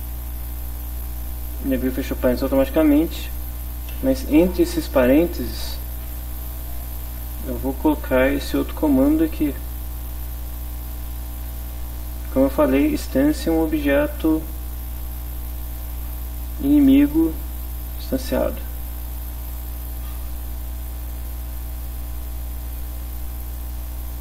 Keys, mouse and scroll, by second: 1.6 Left, 1.9 Right, 3.9 Delete, 5.0 End, 5.5 space, 7.1 shift+0, 7.9 shift+Left, 12.2 Right, 12.7 Left, 12.9 Right, 13.2 End, 13.4 Left, 18.2 click, 19.5 click.